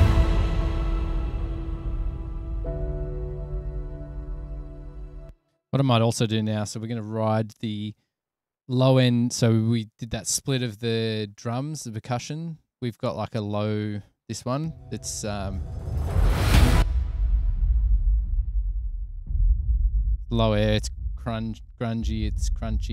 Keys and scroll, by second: 4.7 super+=, 6.9 super+s, 15.6 a, 17.0 s, 21.5 super+=.